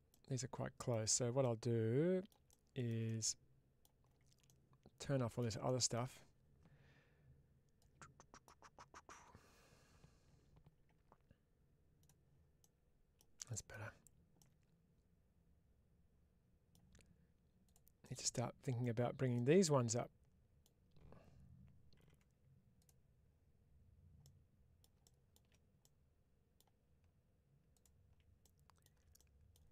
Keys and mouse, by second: 0.0 middle click, 1.3 middle click, 4.3 shift+middle click, 7.6 click, 11.9 click, 12.5 middle click, 14.2-16.6 middle drag, 17.5 click, 17.9 middle click, 19.2-20.5 middle drag, 21.9 2, 22.6 click, 24.1 middle click, 25.7 middle click, 28.3 middle click.